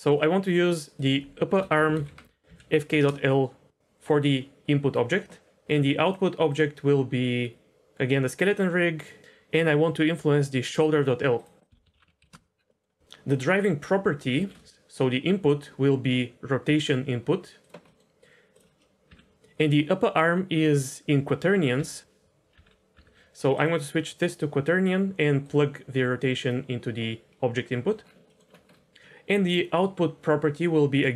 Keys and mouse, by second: 1.0-3.0 drag, 1.8 p, 6.0 click, 6.4-8.5 drag, 11.6 click, 12.6 middle click, 12.9 middle click, 14.3 shift+a, 17.9 middle click, 18.5 click, 19.0 n, 21.7 n, 22.5 n, 22.9 n, 23.5-24.2 drag, 24.6 click, 25.5-26.4 drag, 27.6 middle click.